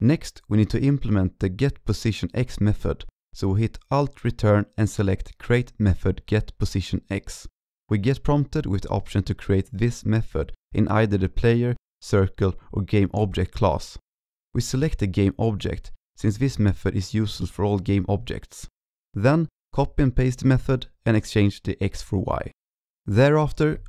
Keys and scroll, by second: 2.5 ctrl+Right, 2.6 ctrl+Right, 2.8 ctrl+Right, 3.0 ctrl+Right, 4.2 alt+Return, 18.7 alt+Right, 19.0 ctrl+shift+Left, 19.0 ctrl+shift+Left, 19.3 ctrl+c, 19.5 ctrl+v, 20.3 ctrl+Right, 20.3 ctrl+Right, 20.9 ctrl+c, 20.9 ctrl+v, 21.0 ctrl+v, 21.3 ctrl+shift+Right, 21.6 ctrl+z, 21.9 ctrl+Left, 22.0 ctrl+Left, 22.2 ctrl+Left, 22.2 ctrl+Left, 22.6 ctrl+s, 23.7 alt+Right, 23.8 alt+Left.